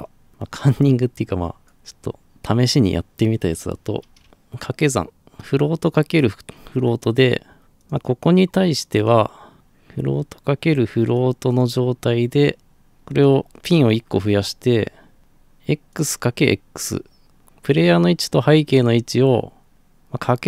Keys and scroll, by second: 4.2 Num_Lock, 4.2 KP_Multiply.